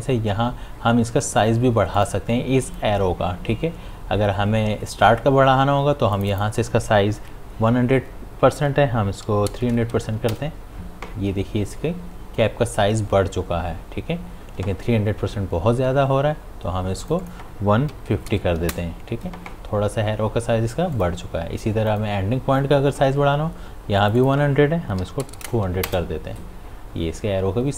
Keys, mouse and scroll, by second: 2.0 click, 6.1 click, 15.8 ctrl+z, 17.0 click, 20.9 click.